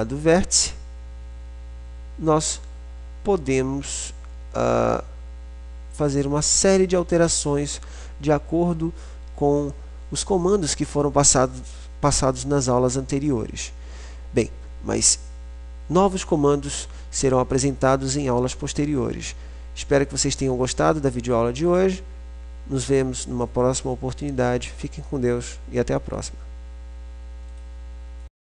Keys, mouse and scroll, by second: 0.3 click.